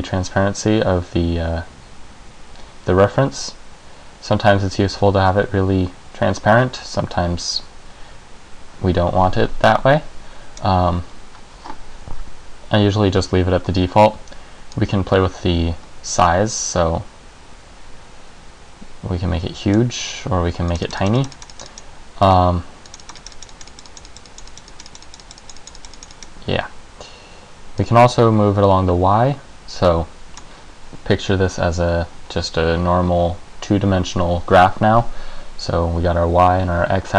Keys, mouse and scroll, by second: 14.9 click, 20.8 click, 21.0 click, 21.2 click, 21.3 click, 21.5 click, 21.7 click, 21.8 click, 23.0 click, 23.2 click, 23.4 click, 23.5 click, 23.7 click, 24.0 click, 24.2 click, 24.6 click, 24.8 click, 25.0 click, 25.2 click, 25.4 click, 25.6 click, 25.7 click, 25.9 click, 26.1 click, 26.3 click, 27.9 click.